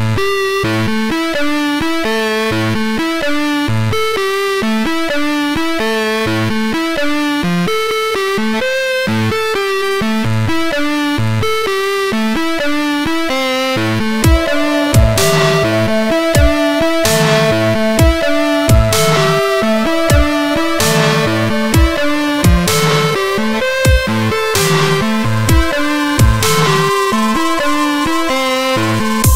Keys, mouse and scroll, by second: 0.1 middle click, 0.9 middle click, 1.3 F3, 2.3 middle click, 3.1 middle click, 3.1-3.5 scroll down 1, 3.8 scroll down 1, 4.3 middle click, 5.1 middle click, 5.9 F3, 6.5 middle click, 6.7-7.1 scroll up 1, 7.1 middle click, 9.1 ctrl+click, 12.1 F3, 14.3 alt+middle click, 16.4 F3, 17.7 middle click, 17.9 alt+middle click, 19.9 alt+middle click, 22.6 middle click, 23.9 F3, 25.7 alt+middle click, 29.0 ctrl+click.